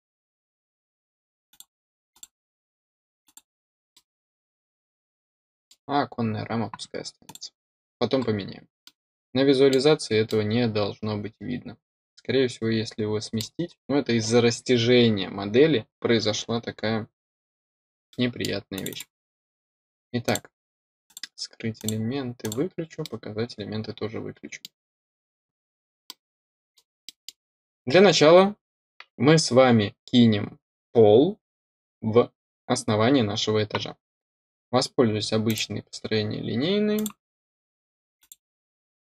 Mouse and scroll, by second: 1.4 click, 2.1 click, 3.2 click, 3.9-5.6 middle drag, 7.2 click, 8.1-8.5 scroll up 4, 8.8-9.6 middle drag, 10.2-13.3 middle drag, 13.6-17.0 scroll down 2, 17.0-17.5 scroll down 2, 18.0 middle click, 18.7 click, 18.8 click, 20.2 click, 21.0 click, 21.7 click, 22.3 click, 23.0-24.6 middle drag, 24.8 scroll up 1, 26.0-26.7 middle drag, 27.0 middle drag, 35.4 click, 35.9 scroll up 2, 36.9 click, 38.1 click.